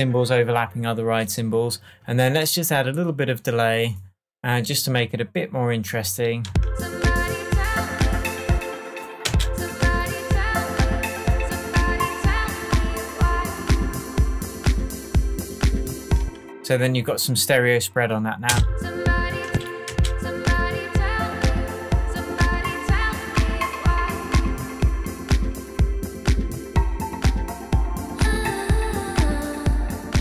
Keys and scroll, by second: 6.4 space, 8.5 space, 16.2 space, 18.4 space.